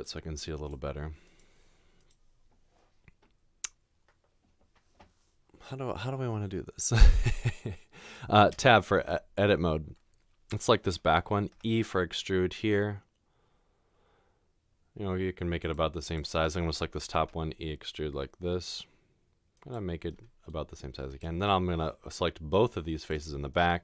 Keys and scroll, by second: 8.6 Tab, 11.5 e, 17.2 e.